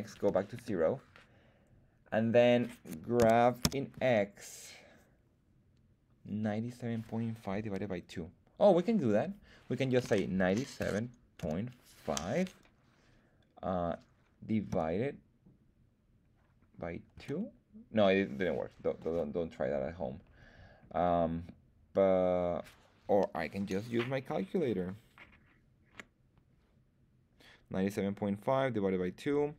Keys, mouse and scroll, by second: 3.1 g, 3.6 x, 10.3 KP_9, 10.8 KP_7, 11.4 ., 12.2 KP_5, 14.7 /, 17.1 KP_2, 18.9 Escape.